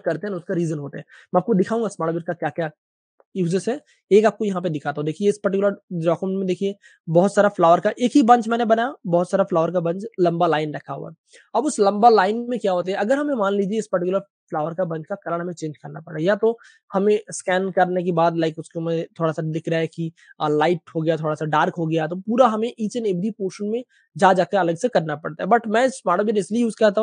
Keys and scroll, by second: 12.5-14.1 typing, 23.0 space, 24.5 space, 24.6 space, 24.7 space, 25.5 v.